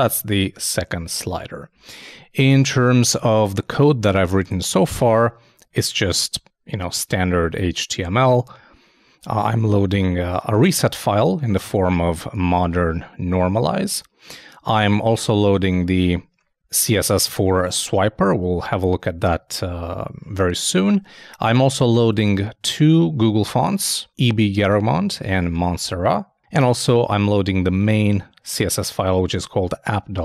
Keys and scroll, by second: 1.8 super+Tab.